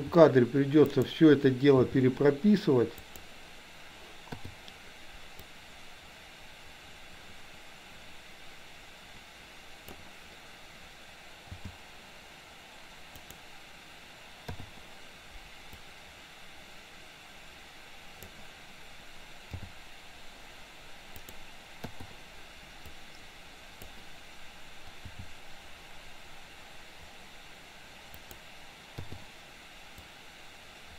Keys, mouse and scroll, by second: 0.0 r, 1.9 g, 4.4 i, 5.5-10.0 drag, 11.5 g, 14.5 i, 15.9-18.4 drag, 19.5 g, 21.9 i, 23.0-24.0 drag, 25.0 g, 29.2 i, 30.2-30.9 drag.